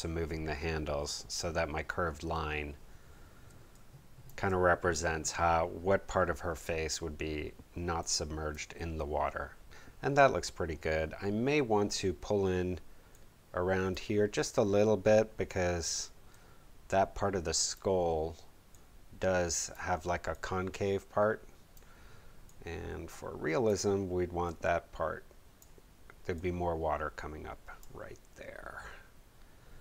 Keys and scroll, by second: 3.4 space.